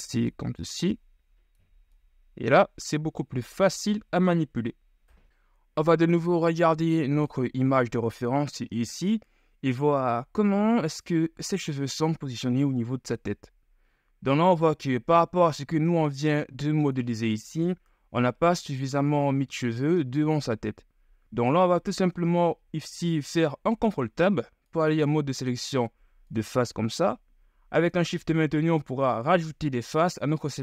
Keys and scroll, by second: 3.2 ctrl+z, 3.8 ctrl+z, 4.6 ctrl+KP_1, 22.1 ctrl+Tab.